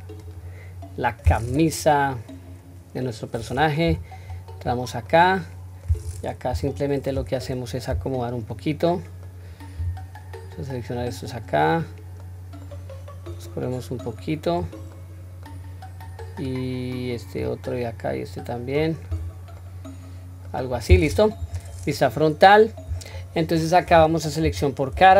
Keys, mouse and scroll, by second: 0.0 scroll up 5, 0.2 click, 3.8 Tab, 4.6-5.1 scroll down 1, 5.1-5.8 middle drag, 6.5 KP_3, 8.5-9.2 middle drag, 9.7 q, 10.5-11.0 drag, 12.2-12.6 middle drag, 13.3 click, 13.5 click, 14.9-15.4 middle drag, 16.0-17.4 drag, 18.2 click, 19.1 q, 19.5-20.6 middle drag, 20.7-21.1 scroll down 1, 21.4 KP_1, 22.4-22.9 scroll up 2, 23.1-23.9 shift+middle drag, 24.4 3, 25.0-25.1 middle drag.